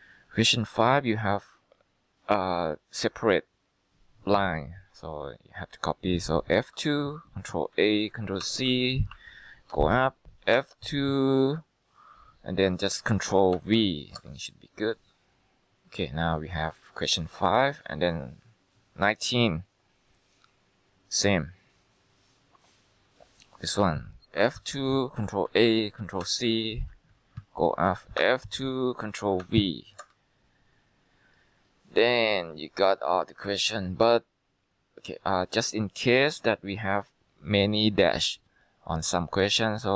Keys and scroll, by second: 6.8 F2, 7.8 ctrl+a, 8.5 ctrl+c, 9.2 Escape, 9.8 Up, 10.7 F2, 13.6 ctrl+v, 14.2 Return, 24.5 F2, 25.5 ctrl+a, 26.3 ctrl+c, 27.0 Escape, 27.5 Up, 28.3 F2, 29.5 ctrl+v, 30.1 Return.